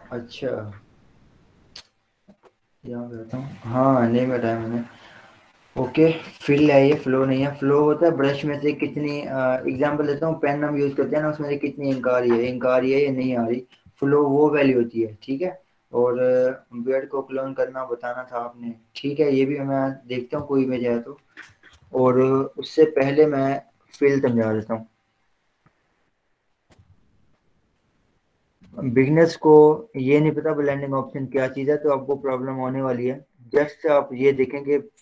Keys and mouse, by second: 5.0 click, 7.1 Return, 8.2 click, 14.1 click, 15.4 click, 21.0 click, 22.7 ctrl+w, 22.8 Down, 24.0 Return, 25.4 ctrl+o, 27.6 ctrl+n, 28.4 Return, 28.8 ctrl+0, 30.9 t, 32.3 click.